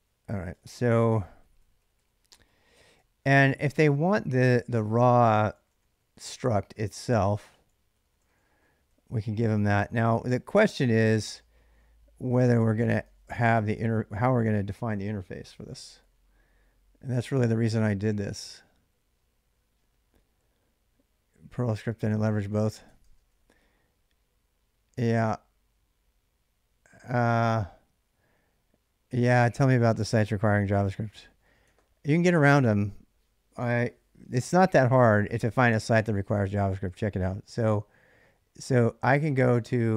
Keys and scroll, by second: 0.0-11.4 typing, 9.5 ctrl+[, 9.5 ctrl+j, 11.2 ctrl+[, 11.2 ctrl+j, 12.4-13.9 typing, 15.0-15.4 k, 15.7 k, 15.8 k, 22.7-23.9 typing, 29.8-31.9 typing, 35.4 ctrl+a, 35.7 c, 38.6-39.9 typing.